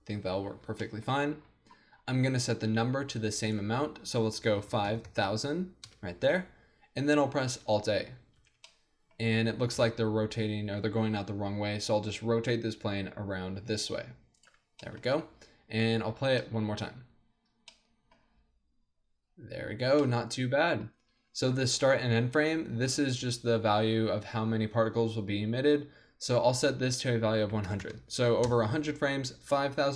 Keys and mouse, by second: 0.9-5.0 drag, 5.0 KP_0, 5.1 KP_0, 7.5 alt+a, 8.4 alt+a, 9.7 KP_1, 11.7 r, 12.2 r, 14.4-18.0 drag, 16.7 alt+a, 20.0-24.3 drag, 21.2 alt+a, 26.5-28.4 drag, 27.8 KP_0.